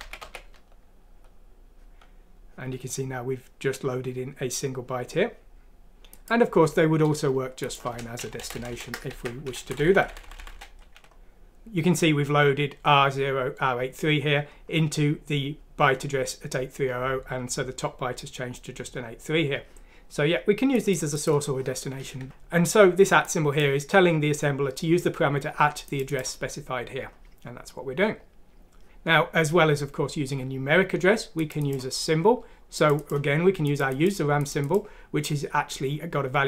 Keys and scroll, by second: 8.4 Left, 8.5 Left, 8.7 Left, 9.1 ctrl+x, 9.7 ctrl+x, 9.7 Right, 9.8 Left, 9.9 Left, 10.1 Left, 10.2 Left, 10.4 Left, 10.5 typing, 22.1 typing.